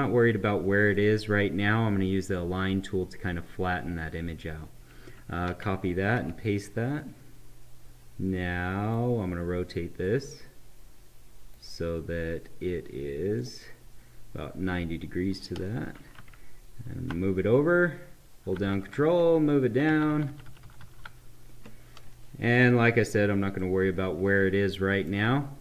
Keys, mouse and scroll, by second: 5.0 click, 5.5 ctrl+c, 6.0 ctrl+v, 6.9-13.3 drag, 16.2 Left, 18.4 ctrl+Down, 20.1 ctrl+Down, 22.5 click, 23.6-25.6 right drag.